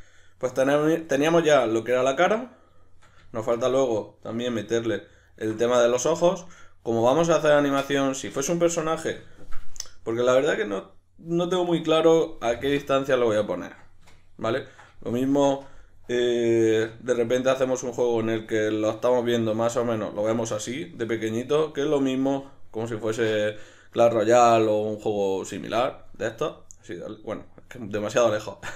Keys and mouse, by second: 1.6 right click, 2.0-5.3 middle drag, 5.3 alt+right click, 5.8-16.8 ctrl+middle drag, 15.3 Tab, 16.8 \, 17.2-28.7 middle drag.